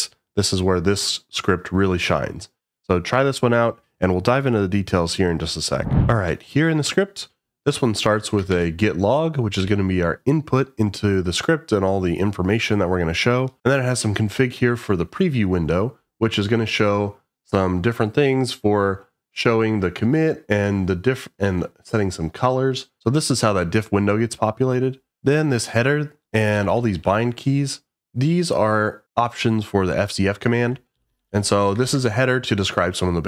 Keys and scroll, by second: 8.5 shift+v, 9.6 j, 25.2 Escape, 25.2 shift+v, 26.5 j, 26.7 j, 27.0 j, 30.6 Escape, 30.9 k, 31.1 k, 31.2 k, 31.8 shift+v.